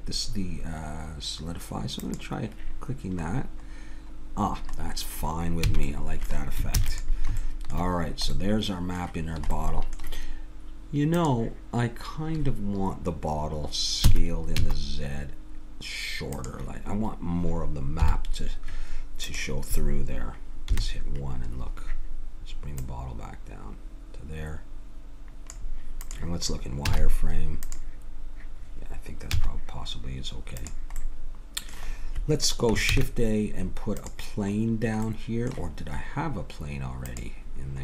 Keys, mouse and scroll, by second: 2.0-3.2 drag, 3.6 middle click, 5.7 a, 6.8 ctrl+s, 11.2-14.0 drag, 14.0 s, 18.0 Down, 19.3-21.2 drag, 20.7 KP_1, 22.8-24.6 drag, 26.0-28.7 drag, 26.9 z, 29.3 z, 31.0-34.1 middle drag, 32.9 shift+a.